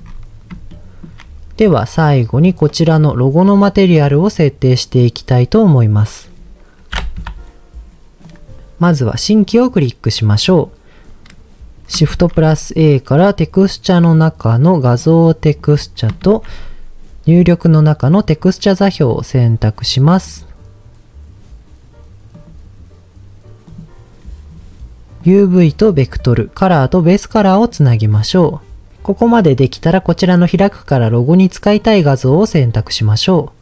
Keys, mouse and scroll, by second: 0.7-1.1 shift+middle drag, 2.5 click, 4.0-5.0 middle drag, 7.1 KP_Divide, 9.4 click, 11.1 click, 12.1 shift+a, 16.2 shift+a, 25.2 click, 27.0 click, 28.4 click, 31.7 click.